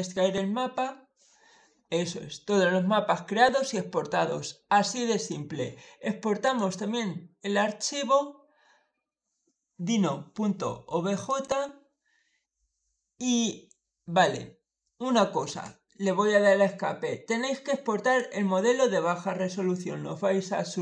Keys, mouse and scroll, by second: 5.0 click, 6.3 click, 11.1 click, 17.3 click.